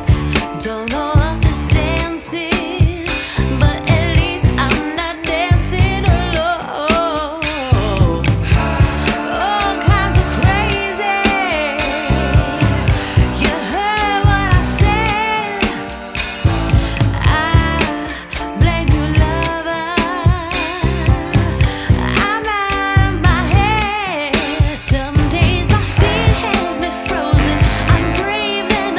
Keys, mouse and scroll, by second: 1.6 click, 2.5 click, 5.9 click, 14.5 click, 19.0 click, 22.0-22.7 scroll up 2, 24.5 click.